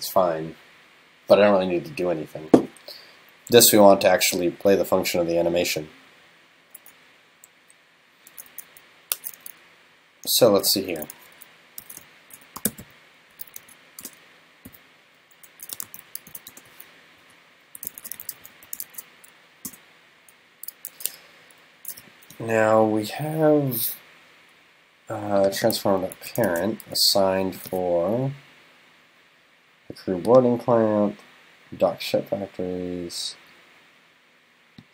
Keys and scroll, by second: 26.2 super+c, 26.5 super+f.